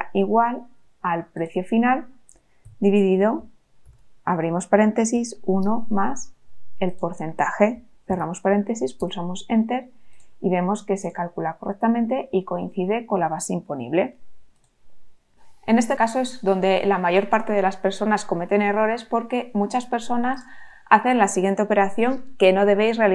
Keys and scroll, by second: 2.6 /, 3.8 shift+8, 5.1 1, 8.0 shift+9, 8.9 Return.